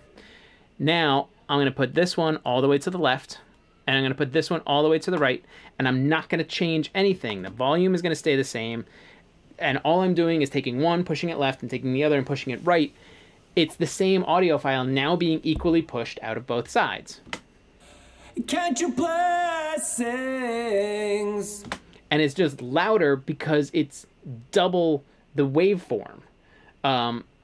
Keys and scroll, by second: 17.3 space, 21.7 space.